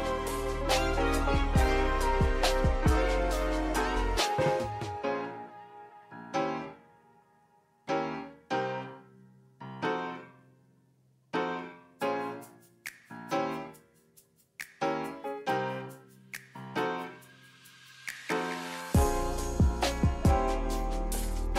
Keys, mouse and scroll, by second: 1.0 click, 2.7 click, 4.3 click, 4.5-7.4 drag, 9.9 click, 11.9 click, 15.4 ctrl+z, 16.6-18.2 drag, 21.1 click.